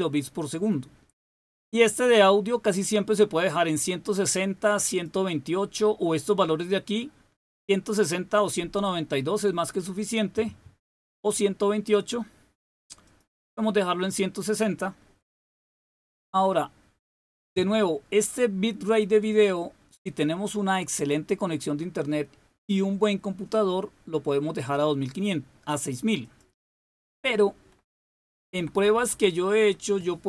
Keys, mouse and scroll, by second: 4.8 click, 12.9 click, 17.3-18.9 drag, 26.2 click, 27.9 Left, 28.5 Left, 28.7 Left, 28.9 Left, 29.0 Left.